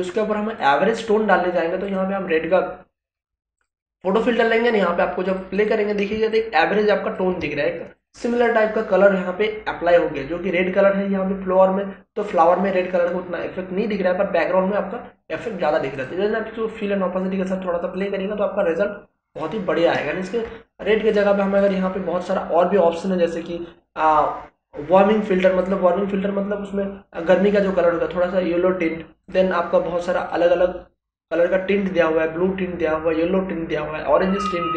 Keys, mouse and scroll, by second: 6.1 space, 6.3-8.0 ctrl+drag, 15.9 click, 25.6 click, 29.3 click, 30.8-31.3 scroll down 1.